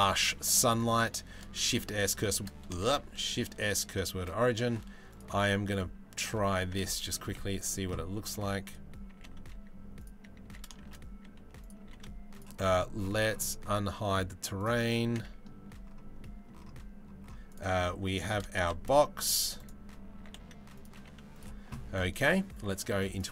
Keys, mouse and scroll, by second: 0.9 shift+s, 2.4 shift+s, 3.7 shift+a, 6.2 s, 7.7 g, 7.9 z, 8.7 g, 10.0 s, 11.4 g, 14.3 click, 14.8 middle click, 15.8 middle click, 17.1 click, 17.9 s, 19.8 s, 20.5 g.